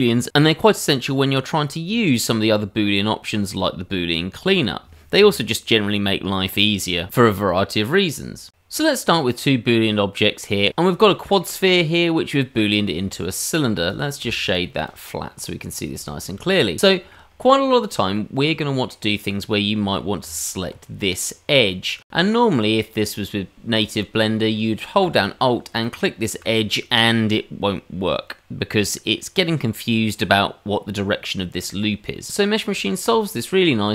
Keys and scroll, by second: 0.7 s, 2.6 g, 5.7 ctrl+KP_Add, 6.2 h, 20.4 Tab.